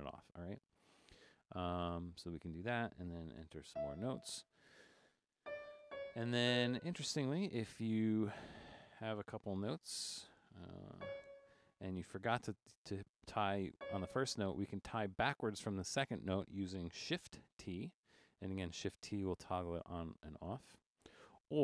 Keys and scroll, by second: 1.9 /, 3.2-6.4 typing, 7.8 typing, 10.7-11.8 typing, 13.8 c, 17.6 shift+t, 19.4-21.1 typing.